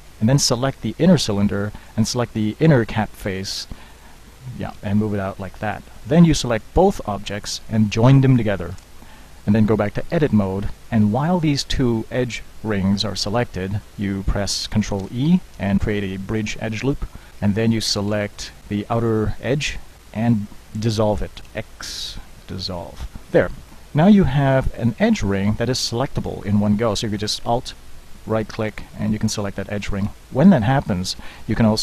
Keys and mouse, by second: 0.1 Tab, 0.7 Tab, 6.1 Tab, 8.9 ctrl+j, 10.2 Tab, 15.1 ctrl+e, 18.1 ctrl+Tab, 19.4 middle click, 21.1 middle click, 21.6 x.